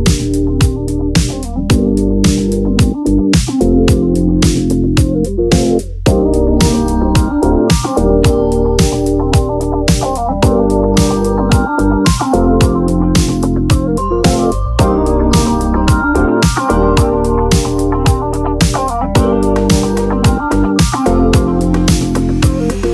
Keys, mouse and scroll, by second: 1.0 ctrl+z, 3.4 click, 7.2-8.2 drag, 11.0-12.4 drag, 18.8 t.